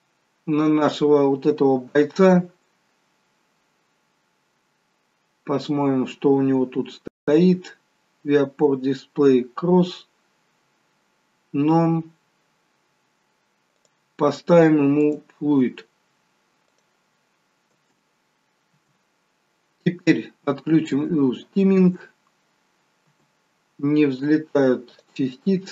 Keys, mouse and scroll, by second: 3.9 scroll up 1, 4.6 scroll down 1, 7.1-8.8 scroll down 5, 8.8-9.9 scroll up 4, 13.7 click, 13.7-15.7 scroll up 6, 17.7 space, 20.8 click, 21.8 space, 24.8 click.